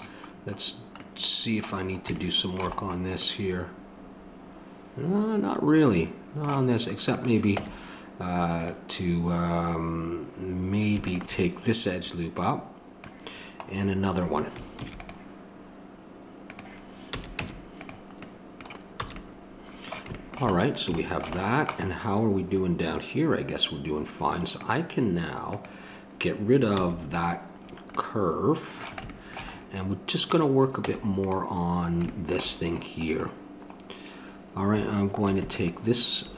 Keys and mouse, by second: 1.9 click, 7.6 Tab, 11.0-14.7 drag, 14.7 ctrl+r, 17.1 a, 17.4 Tab, 19.0 a, 24.6-30.8 drag, 26.7 x, 30.8 Tab, 35.5-36.3 drag.